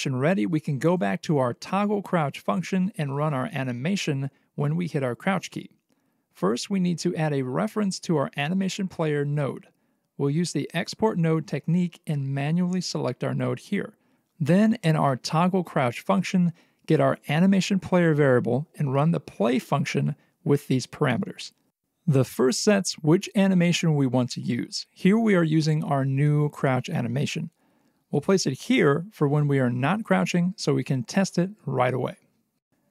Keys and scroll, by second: 9.0 alt+x, 9.9 alt+x, 11.5 alt+x, 13.8 x.